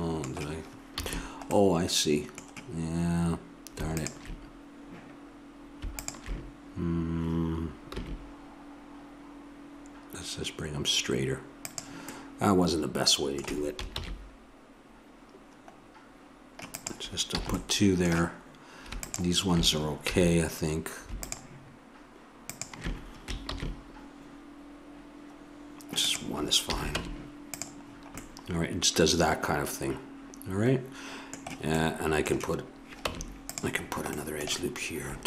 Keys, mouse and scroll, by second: 0.9 a, 4.0-7.6 drag, 7.9 g, 12.5-13.9 middle drag, 13.9 ctrl+b, 17.3 a, 19.0-24.3 drag, 20.1 a, 23.5 ctrl+b, 26.7 a, 27.0 Tab, 31.7 middle click, 33.1 Tab.